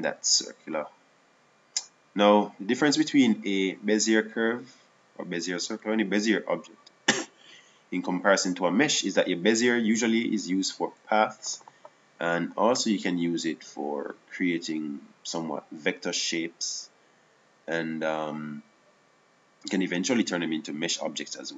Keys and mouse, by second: 2.9-9.8 right drag.